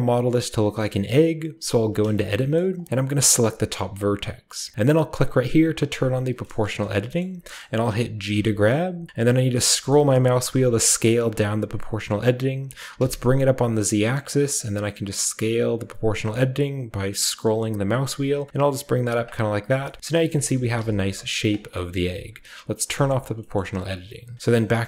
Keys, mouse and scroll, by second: 0.8 shift+middle click, 1.7 Tab, 2.1-3.4 shift+scroll up 1, 2.3 shift+middle click, 2.5 shift+middle click, 3.4 shift+scroll up 1, 3.5-4.7 drag, 5.9-7.4 drag, 6.3-7.1 scroll down 1, 6.4-9.2 middle drag, 7.1-8.3 shift+scroll up 1, 8.3-9.2 scroll up 1, 8.3 g, 9.2-10.8 scroll up 1, 10.8 scroll down 1, 11.0 scroll up 1, 11.2 scroll down 1, 11.3 scroll up 1, 11.9-12.6 scroll up 1, 12.6-12.9 scroll up 1, 12.9 z, 14.0-15.4 scroll down 1, 15.4-16.6 scroll down 1, 16.6-17.7 scroll up 1, 17.7-19.1 scroll up 1, 19.1 click, 19.1 scroll up 1, 19.4 scroll down 1, 19.7 Tab, 20.0-21.4 shift+middle drag, 20.0-21.4 shift+scroll up 1, 20.5 g, 20.8 z, 21.3-24.3 shift+drag, 21.5 Tab, 21.6 middle click, 21.6-23.0 scroll down 1, 21.9 Tab, 24.3 Tab.